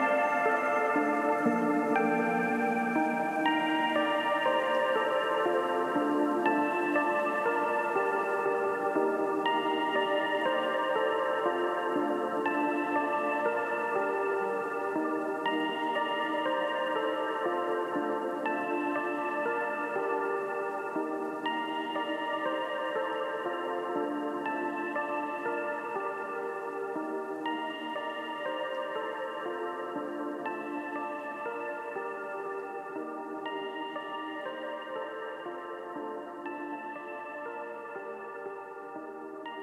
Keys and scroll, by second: 1.2 b, 6.9 v, 11.8 space, 25.2 b, 25.6 ], 27.0-29.5 typing, 31.3 3, 33.6 x, 34.6 x, 35.4 x, 36.6 x, 37.5 v.